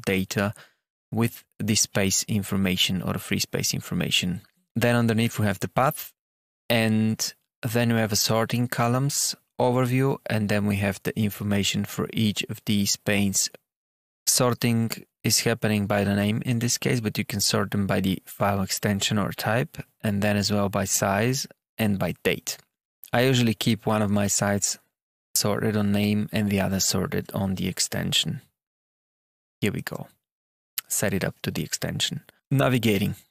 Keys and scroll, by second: 26.2 Tab.